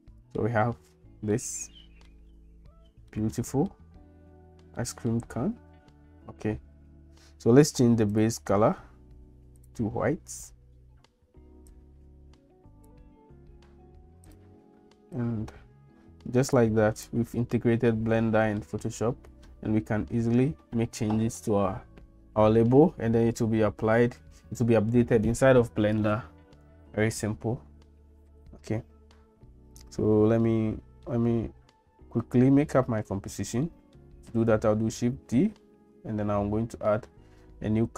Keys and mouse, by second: 1.4 middle click, 3.1 middle click, 4.8 middle click, 8.1 click, 9.6 click, 17.9 shift+middle click, 19.1 middle click, 29.8-31.1 middle drag, 33.7 middle click, 35.2 shift+d.